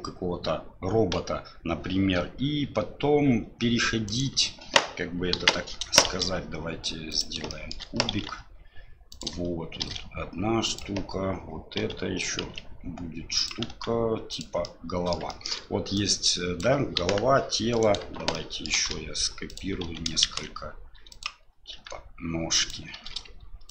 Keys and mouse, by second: 3.4 Delete, 4.0 click, 4.3 Delete, 5.3 KP_1, 6.0 shift+a, 7.5 shift+click, 8.1 s, 9.8 shift+d, 11.8 s, 13.7 s, 14.6 middle click, 15.3 shift+middle click, 15.9 click, 17.0 KP_1, 17.7 right click, 18.3 shift+click, 18.7 shift+d, 19.8 s, 21.7 g, 22.9 shift+d.